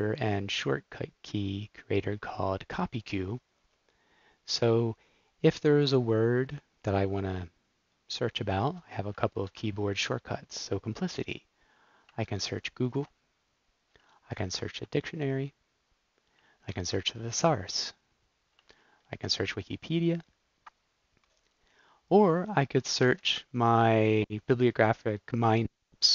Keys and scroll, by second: 9.4 super+c.